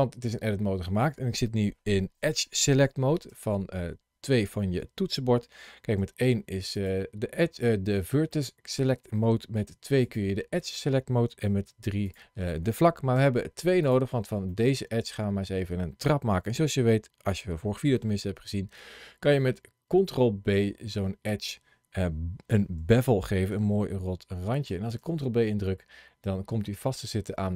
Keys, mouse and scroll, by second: 3.1 2, 5.9 1, 6.6 click, 8.1 middle click, 9.5 2, 9.9 click, 11.5 3, 11.9 click, 13.0 2, 13.7 click, 14.3 middle click, 17.4 ctrl+b, 24.9 ctrl+b.